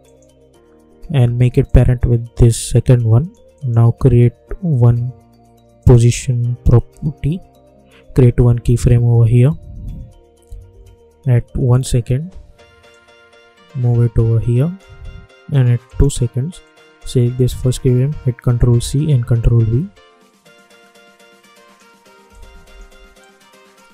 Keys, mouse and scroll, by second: 5.7 click, 10.4 =, 10.6 =, 11.6-18.5 drag, 18.5 ctrl+c, 19.1 ctrl+v, 20.5-23.9 drag.